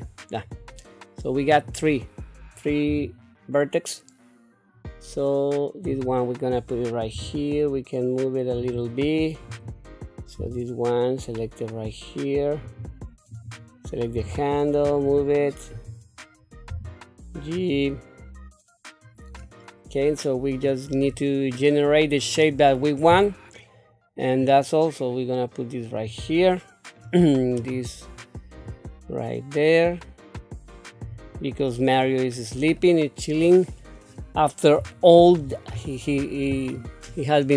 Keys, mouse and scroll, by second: 1.5 click, 2.9 g, 7.1 r, 9.5 click, 10.4 g, 13.3 click, 14.1 g, 15.7 click, 16.7 g, 19.4-21.0 middle drag, 22.4 click, 24.4-26.1 drag, 26.4 middle click, 27.5 click, 28.6-31.0 drag, 31.4 middle click, 32.4-32.8 scroll down 1, 32.8 middle click, 34.1-34.5 scroll down 1, 34.9 shift+middle click, 35.7-37.1 scroll up 2.